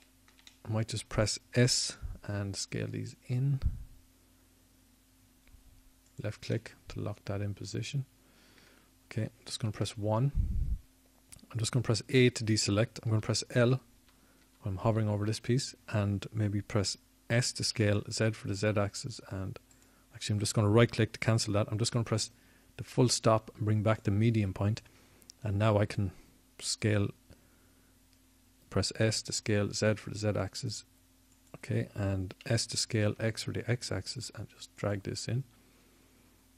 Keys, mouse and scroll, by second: 7.0 s, 11.8-13.2 middle drag, 14.7 KP_1, 16.9 a, 18.4 l, 19.2 l, 20.1 l, 20.5 l, 22.5 s, 26.5 ., 32.2 s.